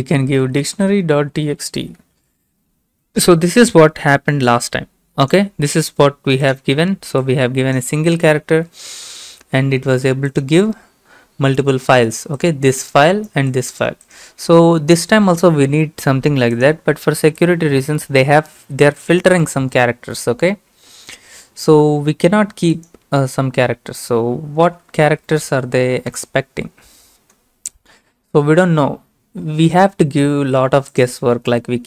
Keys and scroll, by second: 0.0-2.1 typing, 8.6 BackSpace, 24.7-26.1 typing, 26.1 Return.